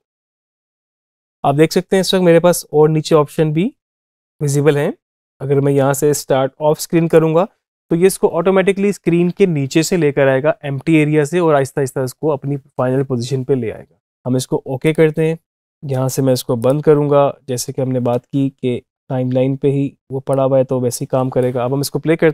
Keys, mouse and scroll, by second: 6.9 click, 14.7-22.1 drag, 22.1 space.